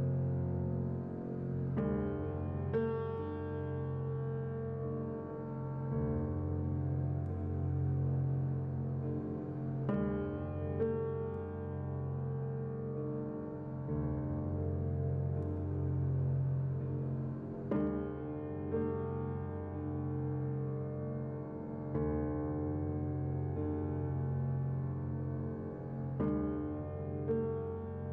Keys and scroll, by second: 14.4-15.3 typing, 17.9-18.6 typing, 21.7 Return.